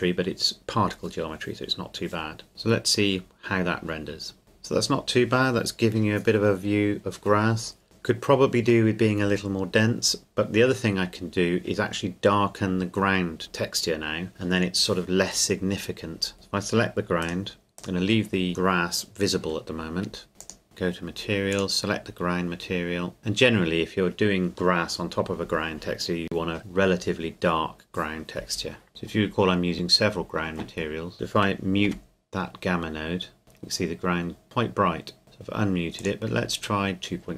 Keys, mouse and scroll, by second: 2.5 click, 16.3 right click, 17.2 click, 20.6 click, 28.9 shift+middle click, 29.2-29.7 scroll up 1, 29.7 shift+middle click, 30.4 scroll up 1, 31.9 m, 35.2 m, 36.0 click.